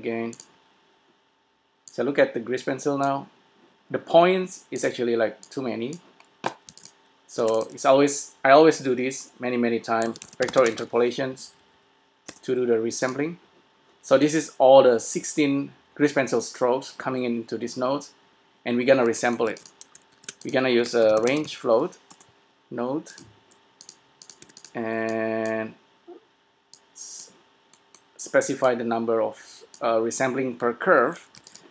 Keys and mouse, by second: 0.7-3.8 drag, 5.2-6.6 drag, 6.9 s, 7.7 shift+a, 11.5 Down, 19.7 s, 20.3 shift+a, 27.0-30.6 drag, 31.6 s.